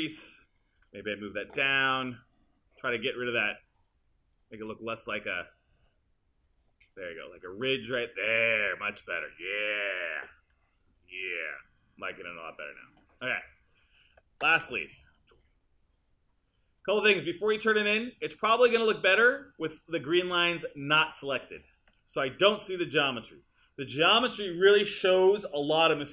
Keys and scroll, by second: 1.5 w, 14.7 q.